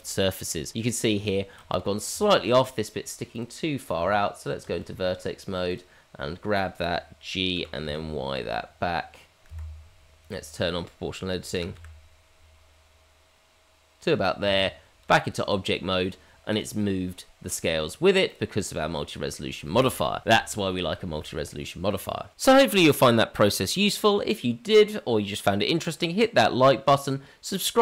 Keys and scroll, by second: 3.8 Tab, 7.5 g, 11.5 g, 14.4 Tab.